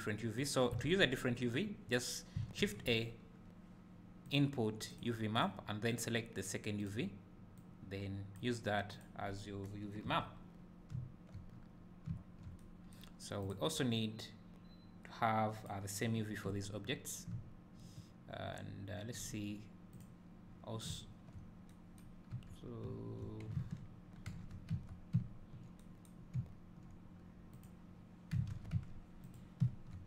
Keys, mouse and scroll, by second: 8.5-9.2 drag, 10.1 Delete, 10.5 scroll down 1, 11.0 `, 11.6 scroll up 1, 12.2 `, 13.5 click, 15.6-17.0 drag, 17.0 scroll down 1, 17.3 `, 20.1 click, 20.9 `, 22.3 Tab, 22.9 `, 24.5 alt+h, 24.9 Tab, 27.7 click, 29.0 Tab, 29.4 click, 29.6 `.